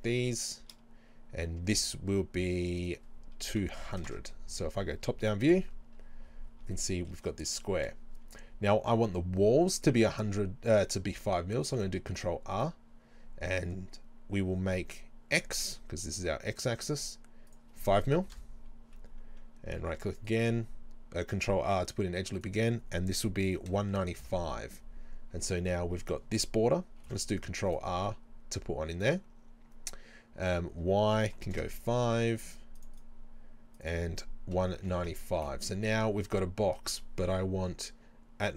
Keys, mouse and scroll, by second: 0.4 shift+right click, 2.8-6.8 drag, 3.9 KP_0, 4.2 KP_Enter, 5.6 KP_7, 6.0 scroll down 1, 6.7 scroll down 1, 6.8-12.6 shift+middle drag, 11.8 ctrl+r, 12.6 right click, 17.5-20.3 drag, 18.4 KP_Enter, 19.8 ctrl+r, 20.4-22.4 right drag, 22.4-27.7 drag, 24.2 KP_Enter, 27.0 ctrl+r, 27.8-30.5 right drag, 30.5-33.0 drag, 31.6 KP_Enter, 33.0 right click, 33.8-38.5 drag, 35.1 KP_Enter.